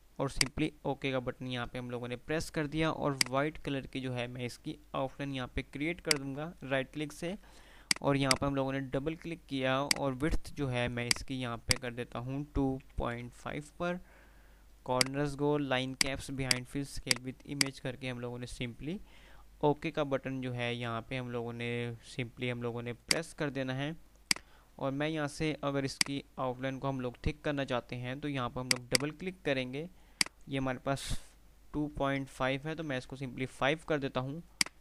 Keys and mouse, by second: 3.1 right click, 5.3 F12, 6.2 click, 15.1 click, 18.9 F3, 23.2 F2, 23.2 click, 26.2 F2, 26.2 click, 28.9-30.9 drag, 33.5 F3, 34.5 shift+click.